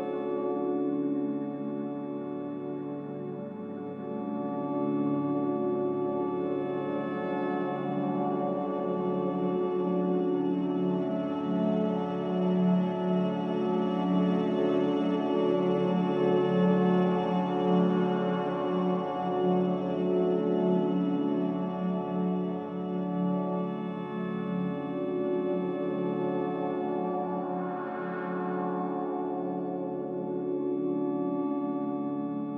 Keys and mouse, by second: 0.8-1.5 drag, 2.7 shift+middle click, 3.9 shift+middle click, 6.0 middle click, 7.6-12.4 middle drag, 14.6-16.3 middle drag, 18.4 shift+middle click, 23.4 click, 24.2-25.4 middle drag, 26.8 3, 28.0 click, 31.2 shift+click.